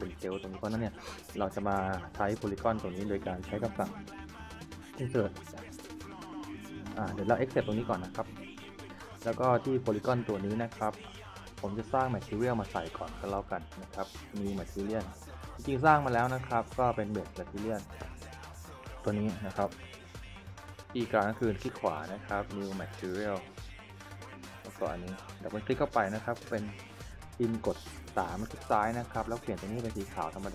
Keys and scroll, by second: 28.0 3.